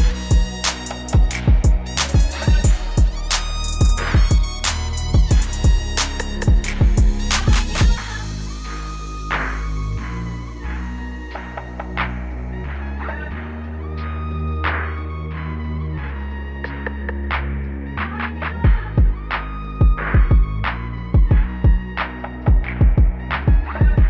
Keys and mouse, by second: 0.8 KP_5, 1.2 KP_0, 2.4 Return, 4.7-7.0 typing, 11.8-12.8 drag, 13.3-15.3 right drag, 16.9 click, 21.0 click, 22.8 KP_8, 23.2 KP_8, 23.6 KP_8.